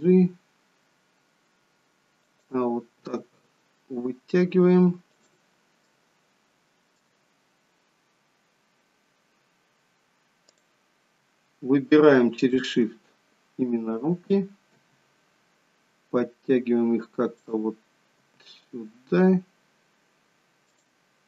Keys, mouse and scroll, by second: 3.0 r, 5.8 middle click, 7.7-8.8 scroll up 2, 8.8-10.0 scroll down 2, 10.5 click, 12.4 shift+click, 14.7 g, 18.3 g.